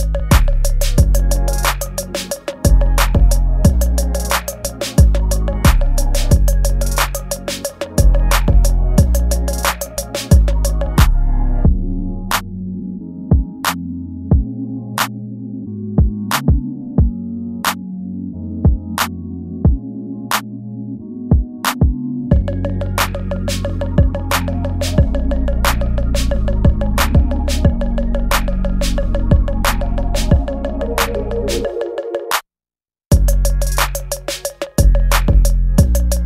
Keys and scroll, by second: 2.2 ctrl+z, 3.8 ctrl+z, 4.6 ctrl+z, 7.6 space, 8.9-12.0 typing, 9.2 ctrl+z, 9.8 ctrl+z, 14.5 space, 15.4 space, 16.0 ctrl+z, 18.3 space, 18.9 space, 19.0 ctrl+z, 20.0 space, 23.4 space, 24.2 ctrl+z, 25.0 space, 25.8 space, 26.3 space, 26.7 ctrl+z, 27.1 ctrl+z, 27.4 space, 28.8 space, 29.4 ctrl+z, 31.8 space, 32.4 ctrl+z, 32.6 space, 33.1 ctrl+z, 36.1 space.